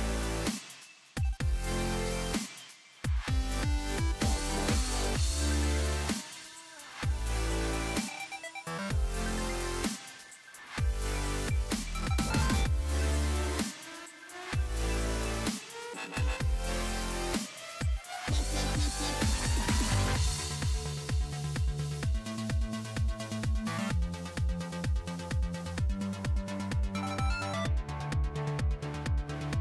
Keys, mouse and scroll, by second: 1.1 click, 1.8 click, 2.9 ctrl+z, 6.1-8.0 typing, 9.0-11.4 typing, 11.3 click, 12.7 F5, 14.1-16.5 drag, 19.3 ctrl+z, 19.9 click, 20.8 ctrl+z, 21.6 [, 22.0 [, 23.4-28.5 drag, 28.5-29.6 drag.